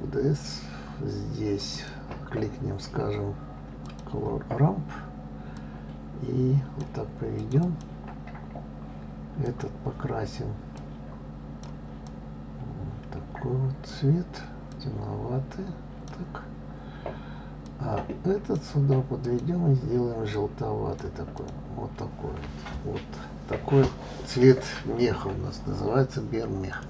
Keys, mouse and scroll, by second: 1.7-4.7 drag, 5.5-8.3 drag, 9.4 click, 17.6-19.3 drag, 26.7 click.